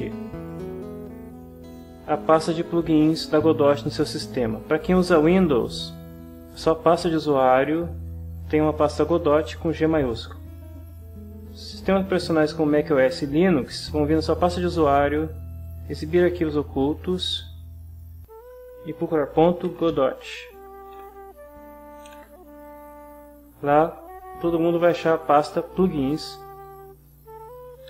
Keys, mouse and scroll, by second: 1.6 alt+Tab, 16.2 ctrl+h, 16.9-18.1 ctrl+drag, 19.0-20.4 typing, 21.0 Return, 22.0 ctrl+h, 23.0 click, 26.6 click.